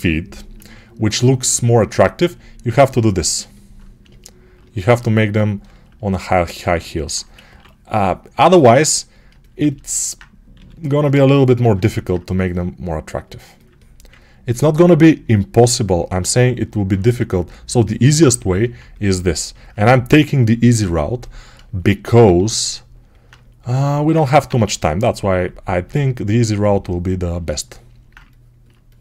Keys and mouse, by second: 7.3 6, 9.2 ctrl+alt+click, 10.4 g, 11.4-18.3 alt+drag, 18.3-23.6 alt+right drag, 23.6 alt+click, 24.2-26.2 alt+right drag, 24.4 1, 26.2-29.0 drag.